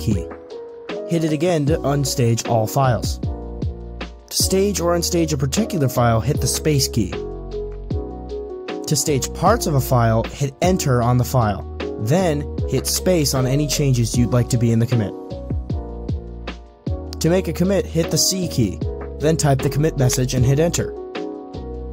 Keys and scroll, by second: 6.4 space, 10.2-11.0 typing, 12.9 space, 17.8-18.6 typing, 20.3 Return.